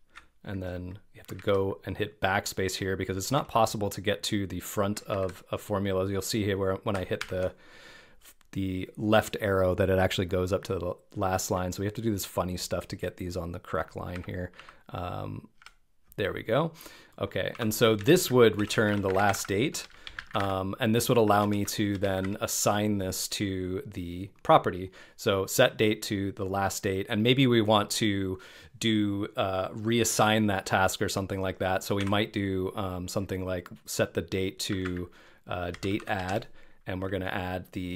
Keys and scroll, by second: 1.4 super+Right, 5.2 super+Left, 7.2 super+Right, 11.4 BackSpace, 14.2 Right, 14.7 Left, 19.0 shift+d, 19.8 BackSpace, 23.4 shift+), 35.8 Down.